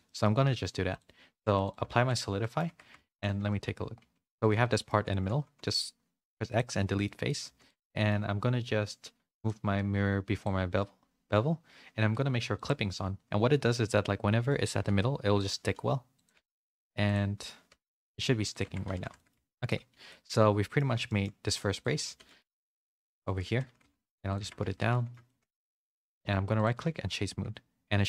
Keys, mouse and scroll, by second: 0.0 shift+middle click, 0.9 click, 1.6 click, 1.9 ctrl+a, 2.3 middle click, 2.6 Tab, 3.0 shift+middle click, 3.3 z, 3.9 3, 4.4 middle click, 5.0 z, 5.4 x, 7.0 middle click, 7.4 2, 7.6 click, 7.9-9.4 middle drag, 9.4 click, 12.5 click, 14.8 g, 16.3 z, 17.0 click, 17.6-19.9 typing, 18.6 Tab, 19.1 middle click, 19.5 shift+middle click, 20.0 middle click, 21.0 shift+middle click, 21.7 click, 21.8 Tab, 22.0-24.7 typing, 22.2 middle click, 24.4 Tab, 24.9 middle click, 25.2 shift+middle click, 25.6 middle click, 26.0 click, 26.8 a, 27.0 a, 27.1-28.0 middle drag.